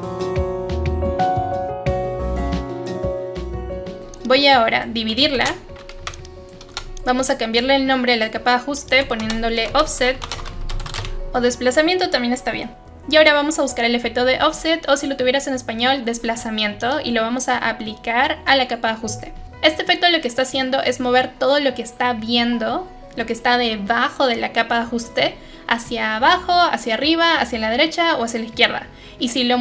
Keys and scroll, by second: 3.8 Delete, 5.3 ctrl+shift+d, 6.0 Delete, 9.2 Caps_Lock, 9.4-11.4 typing.